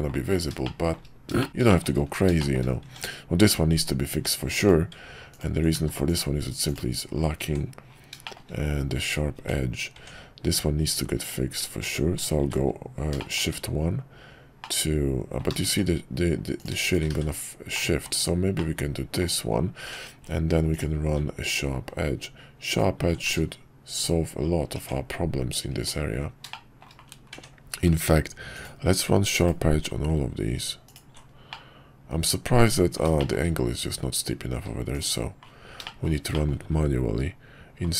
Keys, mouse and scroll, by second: 0.6 shift+middle drag, 1.4 shift+middle click, 1.7 shift+middle click, 2.3 shift+middle click, 2.8 Tab, 5.7 q, 7.4 Tab, 8.2 shift+middle click, 11.5 click, 11.9 shift+click, 12.5 shift+1, 13.2 shift+middle click, 14.6 middle click, 15.6 ctrl+z, 17.1 1, 17.7-19.2 middle drag, 19.8 Tab, 23.2 q, 24.7 Tab, 26.5 shift+middle drag, 31.7-33.0 middle drag, 34.5 q, 35.8 shift+middle click, 36.3 middle click.